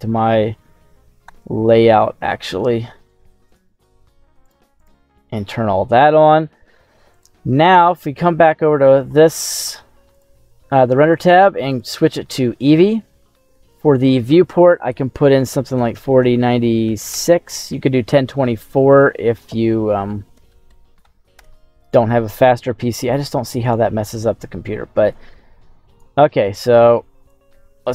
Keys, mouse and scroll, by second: 0.1-0.6 scroll down 1, 0.6-1.2 scroll down 1, 1.2 /, 1.9-2.4 scroll up 2, 3.4-5.0 drag, 5.2-6.3 scroll up 2, 7.0 click, 8.0-10.0 scroll up 7, 10.0 click, 10.0-10.5 scroll up 2, 11.0-12.0 drag, 13.8-17.3 drag, 18.8-21.4 drag, 22.6 middle click, 23.6 right click, 25.0 click, 27.2 click.